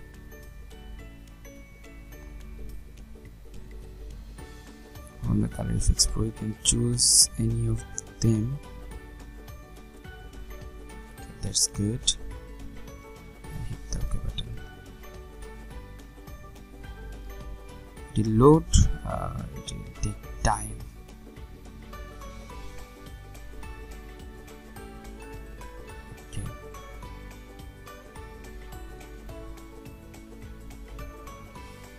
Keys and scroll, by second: 16.0 ctrl+0, 25.3 ctrl+0.